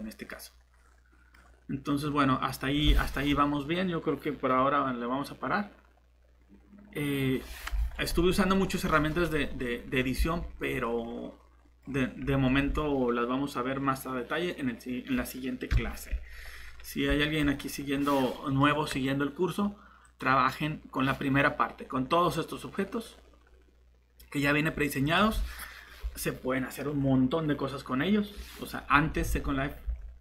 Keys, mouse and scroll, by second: 10.2 shift+Tab, 15.7 shift+Delete, 29.2 alt+shift+Tab, 29.8 Tab.